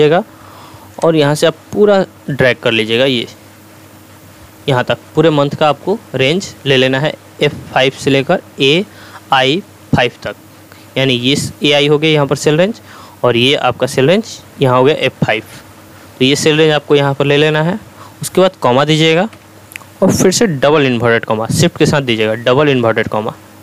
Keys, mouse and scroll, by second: 1.0-5.0 drag, 19.3 ,, 22.8 shift+'.